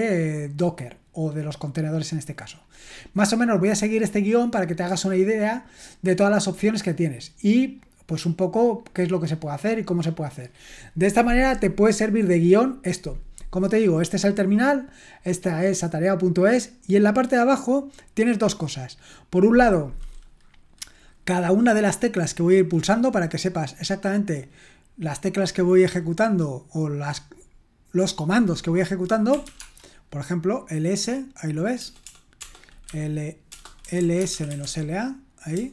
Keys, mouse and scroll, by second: 0.5-2.2 scroll down 3, 2.6-3.3 scroll down 4, 6.4-7.8 scroll down 4, 7.8-8.7 scroll up 2, 8.8-10.7 scroll down 4, 14.4-16.6 drag, 29.0-29.9 typing, 31.8-35.1 typing.